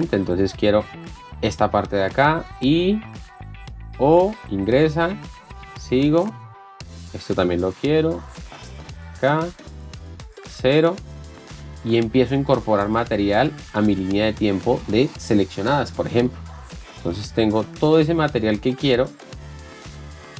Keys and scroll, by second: 1.0-4.7 typing, 6.2-9.7 typing, 11.2-18.0 typing, 19.7-20.3 typing.